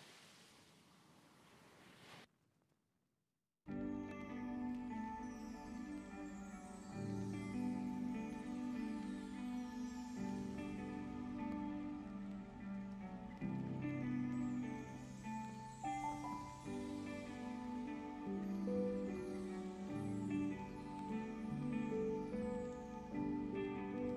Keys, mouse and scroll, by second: 0.0 click, 1.6 click, 3.7 click, 4.1-6.3 middle drag, 6.3 click, 6.9 s, 9.2 s, 10.9 click, 13.7 click, 14.6 click, 15.1 click, 16.3 click, 16.6-20.5 middle drag, 20.5 scroll up 4, 21.3-23.5 middle drag, 23.5 click.